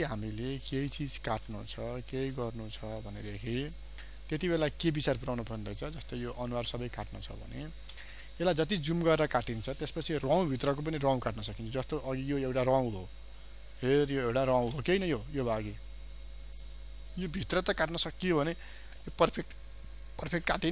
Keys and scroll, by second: 2.5 ctrl+0, 3.1 ctrl+space, 8.6 ctrl+space, 12.9 ctrl+space, 19.0 ctrl+0.